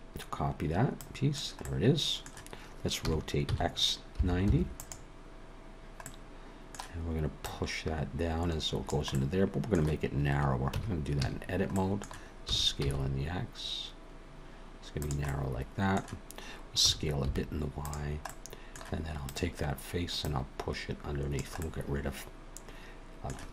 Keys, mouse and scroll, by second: 1.0 click, 1.6 middle click, 3.0 r, 6.1 middle click, 7.4 click, 9.1 middle click, 10.7 Tab, 11.1 a, 11.7 middle click, 12.5 s, 15.3 middle click, 16.8 s, 18.3 middle click, 19.3 click, 20.2 click, 21.6 middle click.